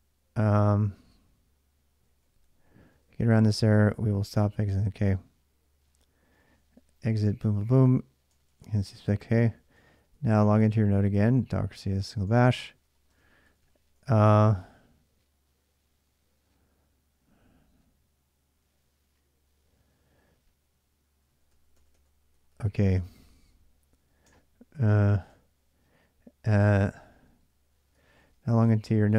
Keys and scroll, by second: 0.0-13.9 typing, 21.1-24.5 typing, 24.8 Return, 27.7-29.1 typing.